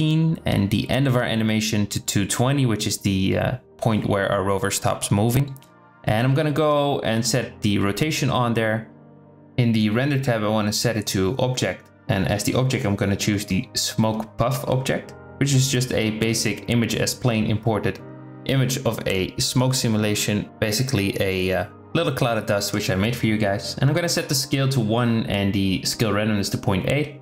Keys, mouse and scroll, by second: 1.4-2.8 drag, 2.0 KP_2, 8.1 click, 9.6-11.0 drag, 11.4-14.1 drag, 18.9-21.7 middle drag, 18.9 z, 22.3-23.9 drag, 24.4-25.9 drag, 26.5-27.2 drag.